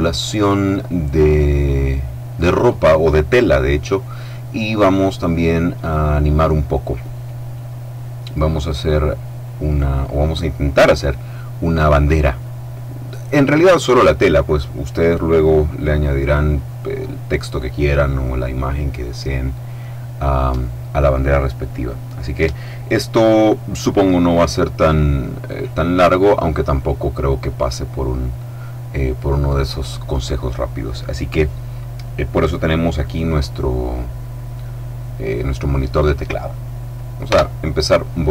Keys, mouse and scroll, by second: 37.3 x.